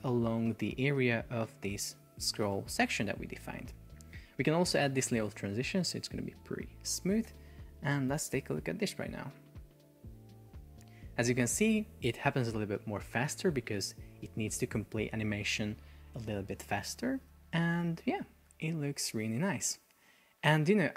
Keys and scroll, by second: 0.6 shift+super+4, 3.6 Escape, 7.4 super+p, 20.3 Escape.